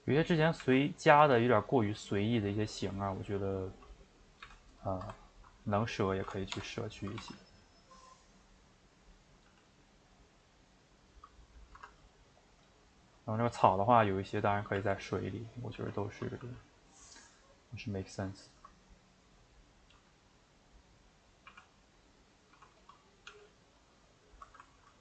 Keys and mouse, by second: 0.6 r, 4.6 x, 4.9 ctrl+shift+middle click, 5.5 click, 6.5 l, 6.8 middle click, 7.2 s, 8.2-9.5 middle drag, 9.5 g, 11.2 middle click, 11.8 Tab, 12.4 click, 12.8-14.8 shift+middle drag, 14.8 g, 15.7 r, 16.4 g, 16.9-17.6 middle drag, 17.6 click, 18.5 shift+click, 18.6-19.9 shift+middle drag, 19.9 g, 20.8-21.5 middle drag, 21.5 r, 22.0-22.5 middle drag, 22.5 r, 22.9 middle click, 23.3 g, 24.0-25.0 middle drag.